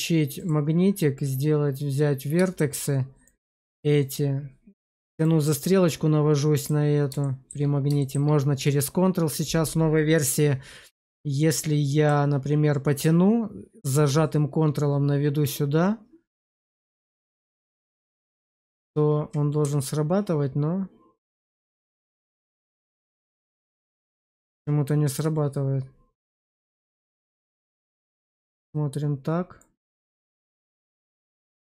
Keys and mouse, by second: 0.2-1.8 drag, 2.5 shift+middle click, 3.2 click, 5.1 click, 7.1 shift+middle click, 7.9 shift+middle click, 8.6 click, 11.2 click, 13.0 click, 22.6 click, 27.7 click, 29.5 click.